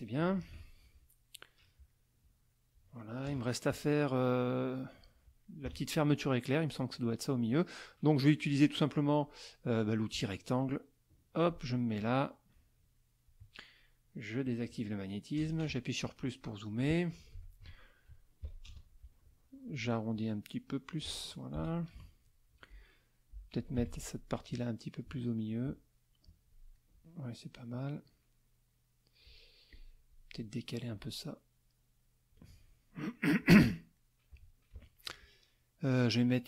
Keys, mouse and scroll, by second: 0.2 KP_Subtract, 1.1 middle click, 1.9 middle click, 2.5 middle click, 3.2 KP_Subtract, 3.9 middle click, 5.6 KP_Subtract, 6.2 middle click, 8.3-9.7 drag, 11.1-13.4 drag, 14.4 click, 15.4 KP_Add, 16.1 click, 17.3 F2, 18.4 KP_Subtract, 18.6 KP_Add, 20.1 ctrl+shift+click, 22.1 middle click, 23.8 F1, 24.4-26.7 drag, 26.7 middle click, 27.9 middle click, 28.7 middle click, 29.7 click, 30.9-32.5 ctrl+drag, 33.4 click, 33.9 middle click, 34.7 KP_Subtract, 35.4 middle click.